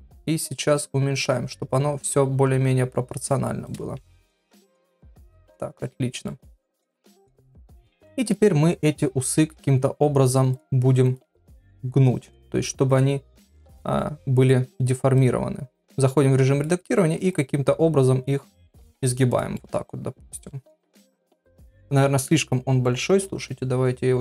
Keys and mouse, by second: 4.7 click, 5.0 Tab, 5.8 middle click, 7.1 KP_1, 7.5 Tab, 8.3 click, 9.4 g, 11.0 click, 11.2 g, 12.2 click, 12.4 g, 13.7 middle click, 14.4 click, 15.2-16.6 drag, 17.3-18.7 drag, 18.8 Tab, 19.5-20.8 middle drag, 21.4 click, 22.0 KP_1, 23.5 s.